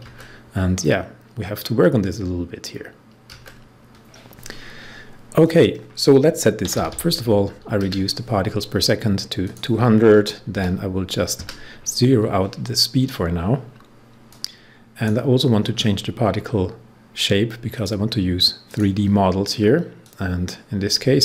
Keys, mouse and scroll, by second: 5.4 click, 6.3-7.3 typing, 9.3 click, 10.5 typing, 14.2-15.6 drag, 15.6 scroll down 1, 17.6 click, 18.6-21.2 drag.